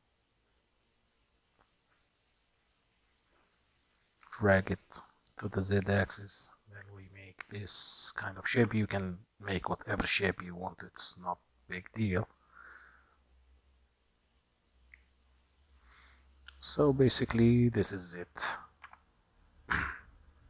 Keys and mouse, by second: 4.3 s, 8.7 f, 13.1 click, 14.9-18.1 middle drag, 18.9 Tab.